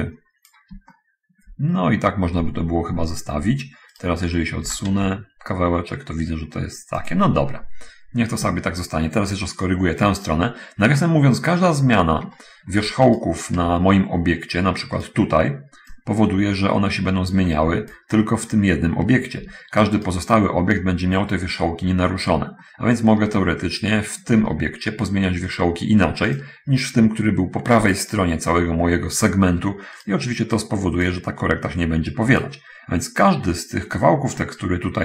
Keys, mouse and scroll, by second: 1.2 shift+middle click, 2.5 middle click, 2.5 scroll down 1, 3.0 middle click, 3.0 scroll up 1, 4.3 right click, 4.8 g, 4.9 x, 7.4 click, 7.8 middle click, 7.8-8.3 scroll down 1, 9.0 shift+middle click, 9.9 shift+right click, 10.9-11.4 scroll up 1, 11.4-11.8 scroll up 1, 12.2 shift+middle click, 13.4 shift+right click, 13.8 Tab, 16.3-18.4 drag, 18.0 Escape, 19.7 Tab, 20.2 right click, 21.5-22.1 scroll up 1, 22.1 scroll up 1, 22.8 shift+middle click, 24.4 Tab, 26.6-28.4 drag, 28.1 Escape, 31.4-32.9 drag, 33.8 right click, 34.6-35.0 scroll up 1.